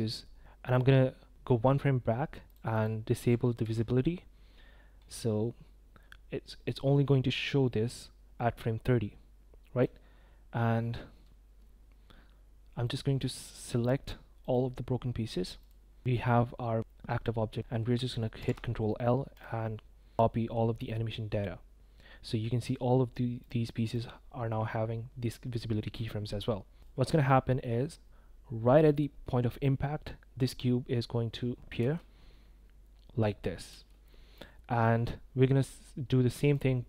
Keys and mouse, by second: 0.4 click, 2.5 click, 2.7 click, 3.2 i, 3.7 i, 6.7-9.8 drag, 12.9-13.6 drag, 14.4-15.7 right drag, 18.4 ctrl+l, 22.7 click, 23.4-24.0 drag, 27.3 middle drag, 27.4 click, 31.8 space, 33.7 space, 34.4 click, 36.5 click.